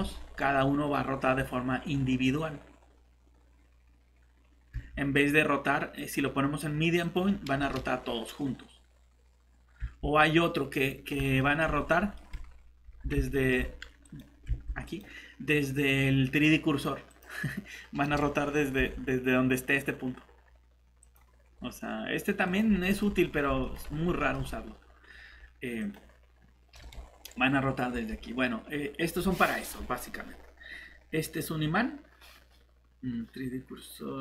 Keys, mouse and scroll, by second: 4.7 Escape, 9.8 Escape, 11.0 scroll down 1, 11.4 middle click, 11.7 scroll down 1, 12.1 middle click, 12.4 scroll down 1, 13.3 middle click, 14.0 click, 14.5 shift+Escape, 18.8 Escape, 21.5 scroll up 1, 22.4 click, 22.8 middle click, 23.0 scroll up 1, 23.6 middle click, 23.7 scroll up 1, 24.2 middle click, 25.8 click, 27.9 Escape.